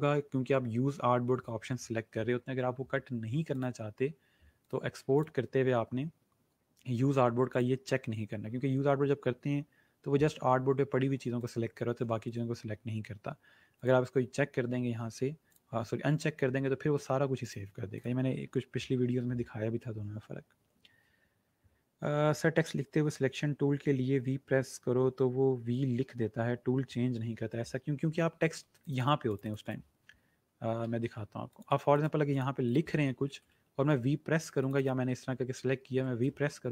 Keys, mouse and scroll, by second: 3.5 click, 7.4 click, 11.4 click, 14.2 click, 17.4 click, 28.7 click, 30.8 ctrl+z, 31.5 click, 32.8-33.8 typing, 34.5 click, 36.1 v.